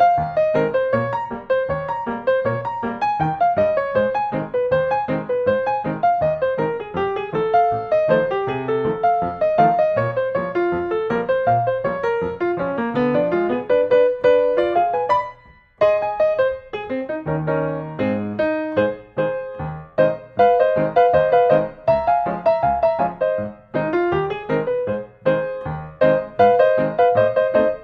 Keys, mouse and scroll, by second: 0.9 n, 1.7 scroll, 6.9 click, 7.9 click, 10.2-11.3 drag, 11.4-12.5 drag, 13.7-14.7 drag, 16.3 Return, 18.5 Escape, 19.5 click, 20.9 click, 22.1 click, 25.5 click.